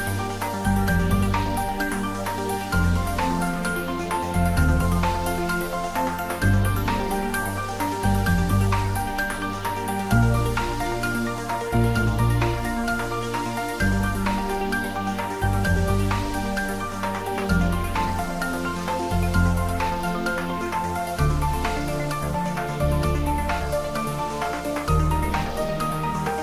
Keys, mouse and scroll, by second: 1.7 click, 3.4 scroll down 1, 5.4-6.2 scroll up 1, 7.8-14.6 drag, 14.6 y, 19.0 Down, 20.1 click, 20.6-21.1 scroll down 1, 24.3-26.2 typing.